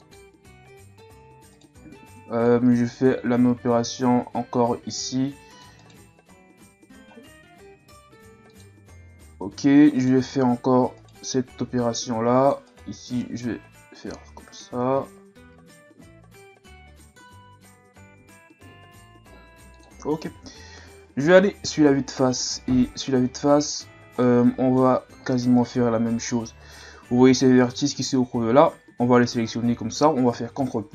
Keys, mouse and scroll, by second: 1.5 right click, 1.8 c, 6.5 g, 9.1 shift+scroll up 2, 10.0 right click, 11.0 right click, 11.2 c, 13.1 g, 20.3 z, 20.6-21.2 scroll down 1, 21.3 KP_1, 22.2 scroll up 1, 24.2 middle click, 24.9-25.2 scroll up 2, 25.6 right click, 26.3-30.4 middle drag, 30.6 ctrl+KP_Add.